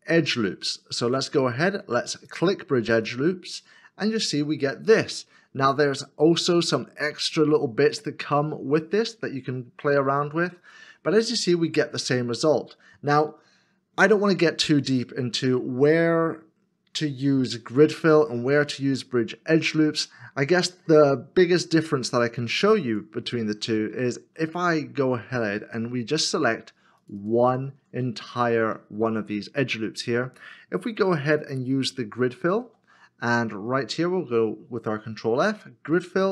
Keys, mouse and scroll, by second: 23.4 ctrl+e, 23.9 ctrl+z, 24.8 middle click, 27.0 alt+click, 28.4 middle click, 32.5 ctrl+f.